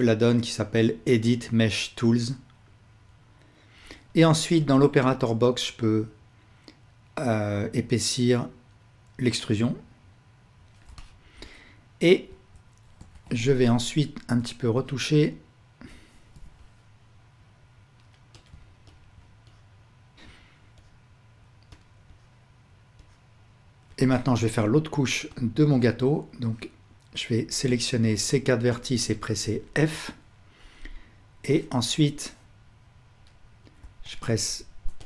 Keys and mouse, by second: 4.7-10.9 drag, 13.1 alt+a, 13.6-18.4 ctrl+middle drag, 16.3 o, 19.0 ctrl+click, 19.5 middle click, 20.1-21.8 ctrl+alt+drag, 22.1 click, 23.0-25.4 drag, 25.7 click, 25.7 middle click, 25.7 right click, 26.5-27.6 drag, 26.5 middle click, 26.5 right click, 28.0 shift+click, 28.0 shift+middle click, 28.0 shift+right click, 31.5-33.8 drag, 31.5-33.3 middle drag, 31.5-33.3 right drag, 34.1 shift+click.